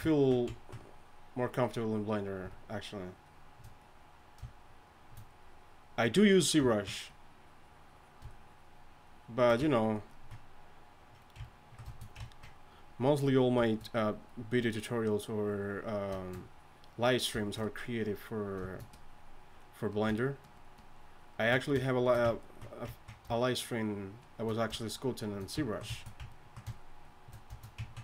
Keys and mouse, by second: 6.7-11.3 drag, 11.3-12.1 middle drag, 13.3-18.6 drag.